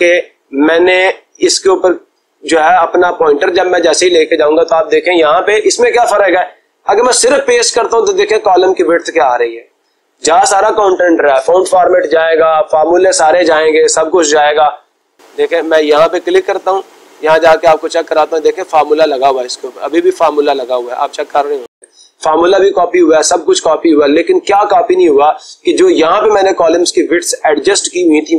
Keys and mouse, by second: 0.1-1.1 drag, 16.1 click, 17.7 click, 18.6 click, 18.8 click, 21.8 Escape.